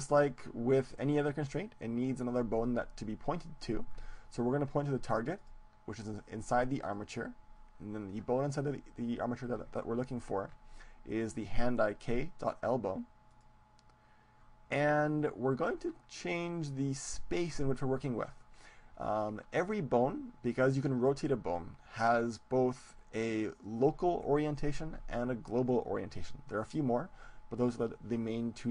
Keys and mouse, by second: 5.4-7.4 drag, 10.0-12.0 drag, 28.1-28.7 middle drag.